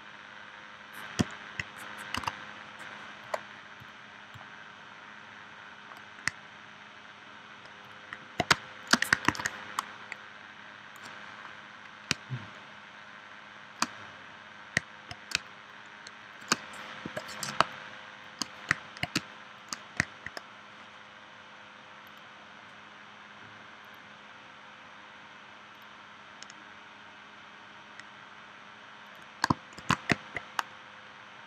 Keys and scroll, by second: 2.2 a, 8.5 space, 9.3 super+s, 12.1 space, 15.4 space, 17.0 p, 17.6 space, 19.1 space, 29.8 shift+c.